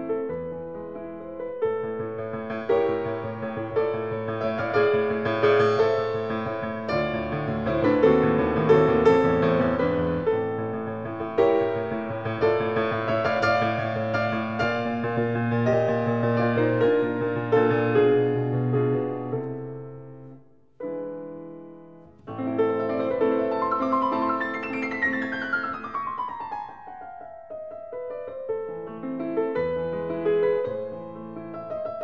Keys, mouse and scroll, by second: 0.7 Escape, 2.1 click, 3.3 click, 4.7 click, 6.8 click, 6.8 s, 8.5 click, 9.3 click, 10.1-10.8 typing, 11.4 Return, 13.0-14.5 scroll, 14.5 scroll, 16.1 click, 18.3 middle click, 19.5 click, 21.2 8, 21.5 Return, 23.5 click, 24.7-25.5 scroll, 26.3 ctrl+scroll, 27.2-28.2 scroll.